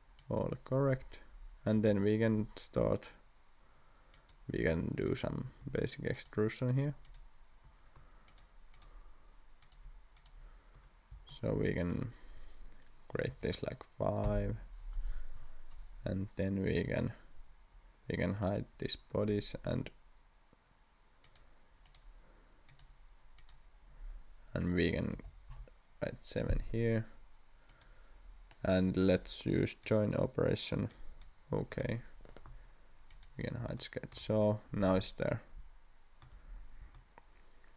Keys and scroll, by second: 1.7 e, 13.3 5, 14.2 Return, 16.7 e, 25.1 7.